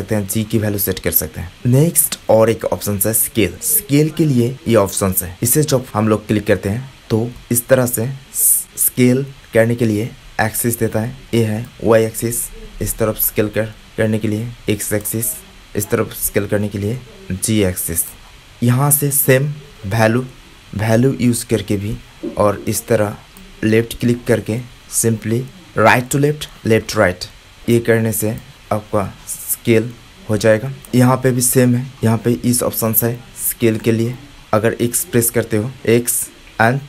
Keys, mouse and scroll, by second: 1.6-3.1 middle drag, 3.1 click, 3.5-5.3 middle drag, 5.3 click, 5.4-7.0 middle drag, 7.0 click, 7.2-11.6 middle drag, 11.6-13.2 drag, 13.9-15.0 drag, 15.7-18.0 drag, 19.3-20.7 drag, 20.7 middle click, 21.0-22.2 drag, 22.2 middle click, 22.6 click, 22.7 middle click, 23.4 click, 23.8 middle click, 24.1 click, 25.4 click, 25.7 click, 28.3-29.3 drag, 29.9 click, 30.9 shift+a, 32.8 middle click, 33.4-34.4 drag.